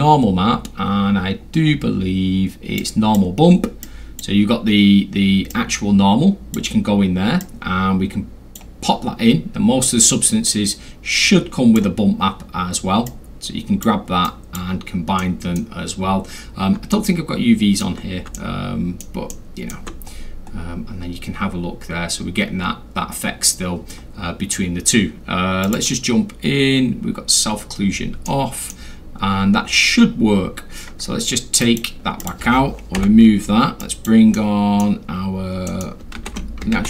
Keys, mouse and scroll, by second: 0.5 middle click, 0.5 scroll, 0.8 middle click, 1.4 middle click, 1.4 scroll, 1.7 middle click, 2.8 click, 3.8 click, 5.5-6.5 drag, 7.4-8.5 drag, 9.8-11.8 drag, 13.0 click, 14.3 click, 15.2 middle click, 16.1 scroll down 2, 16.3 scroll, 16.8-17.2 alt+scroll, 16.9 alt+middle click, 18.3 alt+middle click, 19.3 alt+middle click, 20.1 alt+middle click, 20.1 scroll, 20.5 middle click, 22.6 scroll down 2, 22.8-23.1 scroll, 23.4 scroll down 2, 23.5 scroll, 25.6 click, 28.2-28.7 middle drag, 30.3 scroll up 1, 30.4 scroll, 31.6 drag, 32.2 click, 33.0 Delete, 33.8 click, 34.3 middle click, 35.7 middle click, 36.2 ctrl+z, 36.7 ctrl+z.